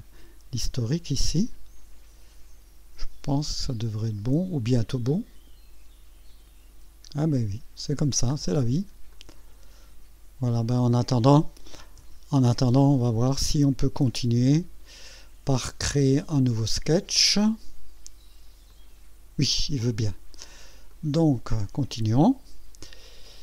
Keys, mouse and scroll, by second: 8.3 scroll down 2, 9.1-11.2 drag, 12.0 KP_1, 12.8 scroll up 2, 14.0-15.0 right drag, 18.7 click, 20.9 click.